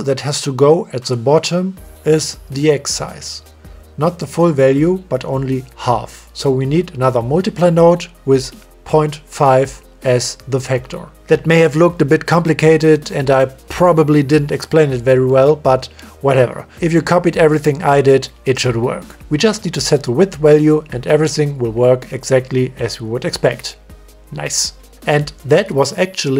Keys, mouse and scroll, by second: 2.9 click, 3.6 click, 3.9 shift+d, 8.4-10.0 drag, 11.4-14.4 drag, 15.5 click, 16.1 middle click, 17.8 click, 18.1 click, 19.2 click, 19.6 click, 20.0 click, 20.3 click, 22.5 click, 22.9-23.6 drag, 23.6 click, 23.9 click, 24.1 click, 24.5 click, 24.9 click.